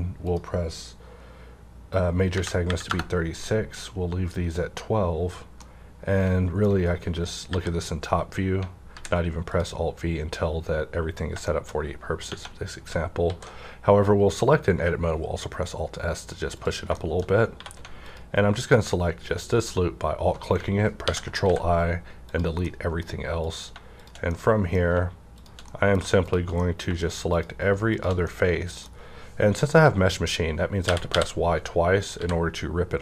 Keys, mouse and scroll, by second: 0.2 F9, 0.2 click, 2.2 KP_3, 2.6 KP_6, 2.8 KP_Enter, 5.6 KP_Enter, 5.6-8.3 middle drag, 7.4 KP_5, 8.3 scroll up 1, 8.8 alt+v, 9.4 click, 11.4 shift+middle click, 11.7-12.1 shift+scroll up 1, 12.2 Tab, 13.2 s, 16.5 click, 16.5 s, 16.9 shift+middle click, 17.2 shift+scroll up 1, 17.5 3, 18.0 click, 18.1 alt+click, 20.6 3, 20.9 i, 21.4 x, 22.2 click, 22.6-23.9 middle drag, 23.4 click, 23.9 shift+click, 24.3-25.7 middle drag, 26.6 middle click, 26.6 shift+click, 27.2 shift+click, 27.3 shift+click, 27.9 shift+click, 28.2-32.2 middle drag, 30.8 typing, 32.2 g.